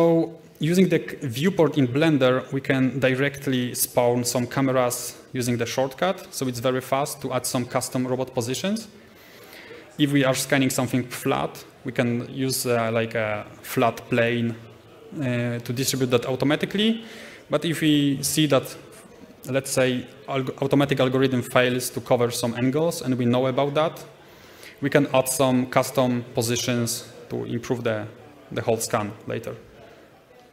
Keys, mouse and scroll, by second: 0.2 shift+middle click, 0.4 scroll down 2, 0.5-1.8 middle drag, 1.8 shift+right click, 2.1 alt+c, 2.3-3.4 middle drag, 3.4 click, 3.9 g, 6.0 click, 6.6 g, 9.4 middle click, 9.8-10.4 scroll down 2, 10.0 shift+middle click, 10.4 middle click, 11.8 scroll up 1, 12.1 shift+middle click.